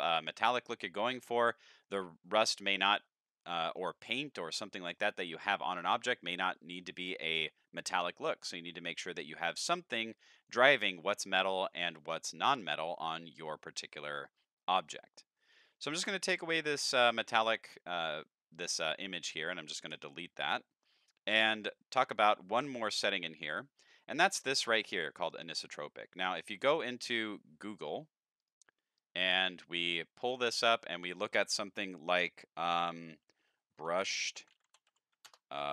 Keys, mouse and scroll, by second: 0.6-1.0 scroll down 3, 1.0 shift+middle click, 1.5 middle click, 2.4 scroll up 2, 2.7 shift+middle click, 3.3-3.8 middle drag, 4.0 shift+middle click, 4.6-4.9 scroll up 2, 4.9 middle drag, 7.1 middle click, 9.0 click, 10.2 click, 11.3-12.2 middle drag, 15.3 middle click, 16.4-17.6 drag, 18.8 click, 20.4 x, 20.7 middle click, 21.6-22.0 scroll up 3, 22.0 middle click, 28.4 click, 29.0 click, 33.9-35.7 typing.